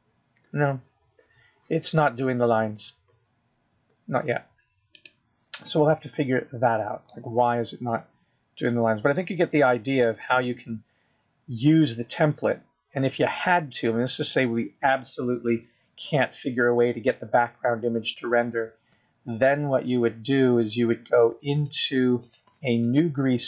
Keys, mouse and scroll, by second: 9.5 middle click, 11.1-11.5 scroll down 4, 11.5 middle click, 12.6-13.2 scroll up 6, 13.7 scroll up 2, 15.0 scroll down 4, 15.9 middle click, 17.4 KP_0.